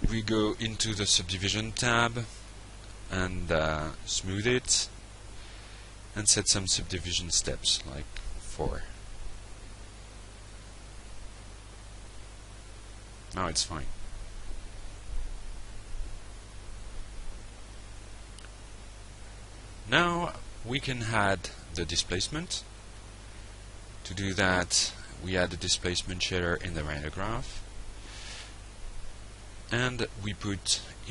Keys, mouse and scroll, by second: 1.7 click, 3.1 click, 4.3-4.8 drag, 5.6 click, 6.4 click, 7.8 click, 16.2 click, 20.7 click, 21.7 ctrl+space, 21.9 d, 22.8 i, 23.3 Down, 23.9 Return, 24.8-25.9 drag, 26.1 click, 27.4 drag, 28.4 click.